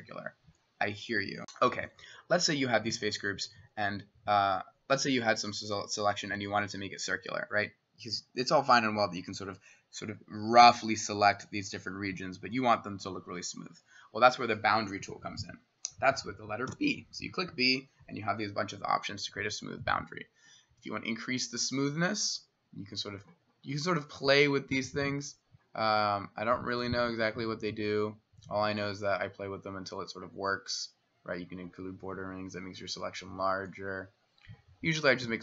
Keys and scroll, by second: 1.4 Delete, 6.4 s, 16.7 b.